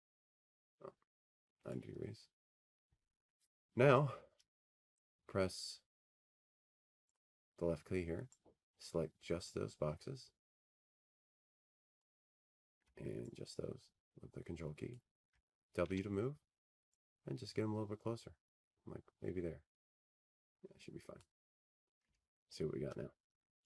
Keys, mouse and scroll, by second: 7.2 click, 12.7-15.1 drag, 17.5-20.4 drag, 21.4 w.